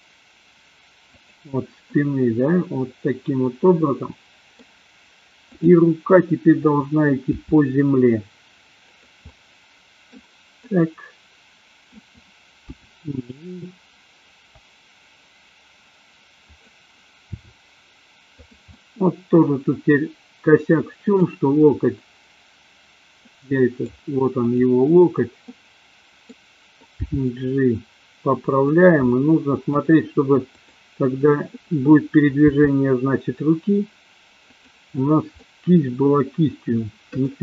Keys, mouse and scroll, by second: 1.2 click, 1.9-4.6 middle drag, 7.2 r, 9.4 middle click, 10.6-12.0 middle drag, 12.9 g, 17.4 r, 18.7-21.2 middle drag, 23.2-24.0 middle drag, 25.5-26.2 middle drag, 27.2 g, 29.0 middle click, 30.5 click, 32.4 r, 35.4-37.2 middle drag.